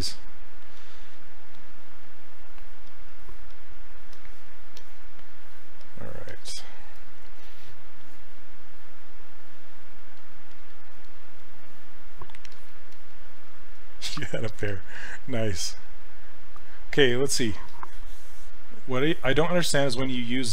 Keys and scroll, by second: 14.7 s.